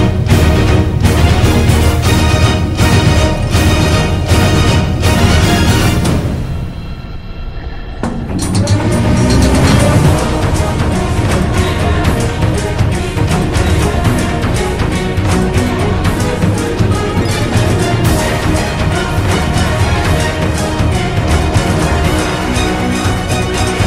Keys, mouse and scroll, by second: 1.4 ctrl+z, 5.1 ctrl+z, 6.6 ctrl+-, 10.5 ctrl+z, 12.3 ctrl+z, 16.0 ctrl+-, 19.1 ctrl+=, 20.7 b, 21.4 ctrl+-.